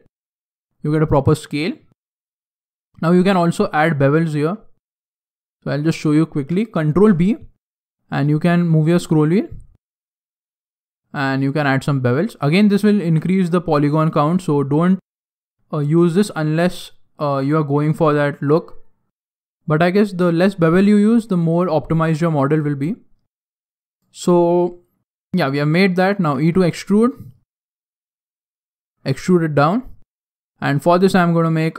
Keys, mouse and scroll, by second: 1.9 scroll up 3, 2.0-2.5 scroll down 3, 2.2 shift+middle click, 2.5 shift+scroll up 1, 3.1 scroll up 1, 3.7 alt+right click, 3.8-4.3 alt+scroll down 1, 4.3 alt+right click, 5.1 click, 5.8 alt+right click, 6.9 ctrl+b, 13.0 ctrl+r, 17.2 ctrl+r, 23.8 alt+right click, 24.4-24.7 scroll down 3, 24.5 scroll up 2, 24.8 shift+middle click, 26.1 e, 27.3 scroll down 2, 27.3 scroll up 1, 27.4 scroll down 2, 27.7 shift+middle click, 29.0 click, 30.0-30.4 scroll down 1, 30.4 scroll down 1, 31.0 shift+middle click, 31.6 scroll up 1, 31.7 scroll down 1.